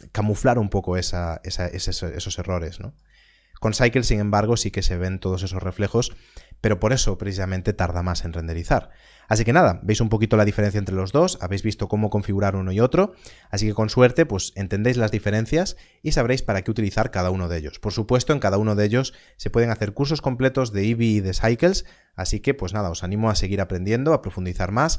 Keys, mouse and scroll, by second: 1.5 click.